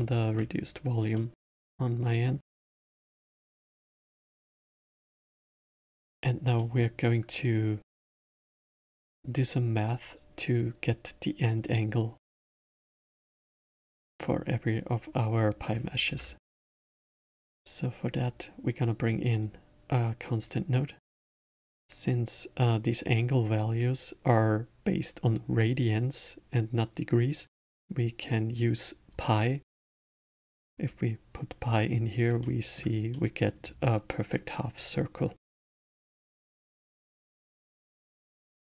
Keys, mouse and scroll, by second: 6.2-6.6 scroll up 1, 6.6-9.6 middle drag, 11.5 click, 13.5-16.0 middle drag, 16.0 shift+a, 21.2-24.2 middle drag, 29.1-32.1 drag, 32.4-33.6 alt+middle drag, 33.6 scroll down 1, 36.4 click, 38.0-38.6 middle drag.